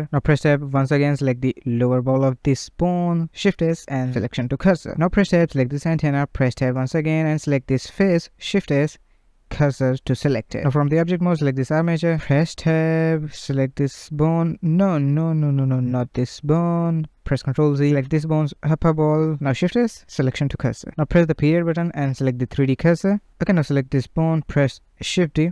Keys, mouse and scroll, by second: 0.0 Tab, 0.9 click, 2.2 shift+s, 4.4 Tab, 4.7 click, 5.2-5.9 middle drag, 5.9 Tab, 6.5 click, 7.1-8.6 shift+middle drag, 8.6 shift+s, 10.9 Tab, 11.4 click, 11.8 click, 12.6 Tab, 12.8 click, 13.8 shift+s, 16.7 ctrl+z, 17.6 click, 18.5 shift+s, 21.1 ., 23.1 click, 24.0 shift+d.